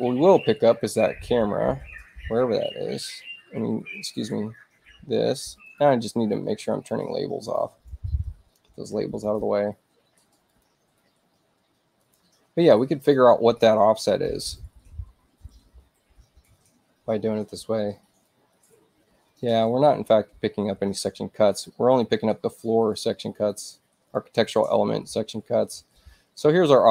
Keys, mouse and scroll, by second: 5.6 click, 7.4 click, 9.2 click, 10.4 click, 11.9 click, 24.1-26.9 drag.